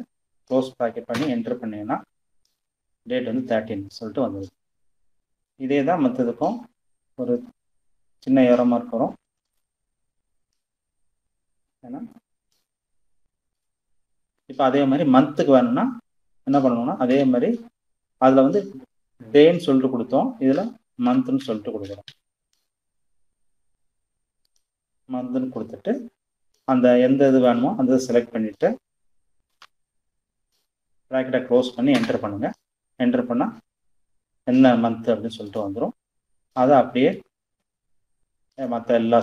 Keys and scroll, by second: 0.2 Return, 16.2 =, 19.6-21.1 typing, 28.6 shift+0, 31.0 Return.